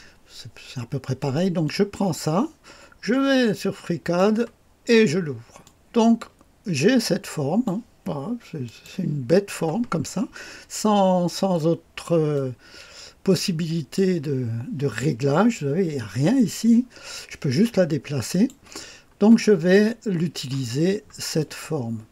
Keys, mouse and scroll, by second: 1.6-4.2 drag, 4.2 click, 5.6-7.8 drag, 8.6 click, 9.7 click, 10.0-11.5 scroll up 1, 11.5 right click, 12.3 middle click, 12.9-13.9 drag, 18.3 click, 18.9-19.7 scroll down 2, 19.7 click, 20.8-21.3 scroll down 2, 21.3 click.